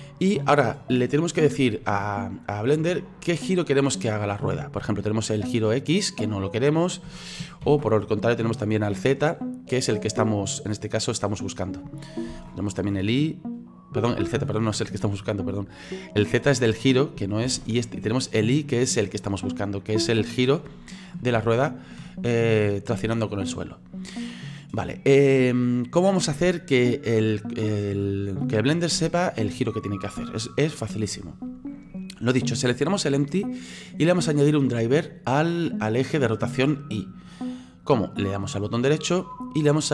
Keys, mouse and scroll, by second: 5.5-7.7 drag, 7.7 ctrl+z, 8.5-12.3 drag, 12.3 ctrl+z, 12.8-14.4 drag, 14.4 ctrl+z, 15.7-17.5 drag, 17.5 ctrl+z, 18.3-21.4 drag, 21.4 ctrl+z, 28.2 scroll down 2, 29.0-36.8 shift+middle drag, 38.8-39.9 right drag.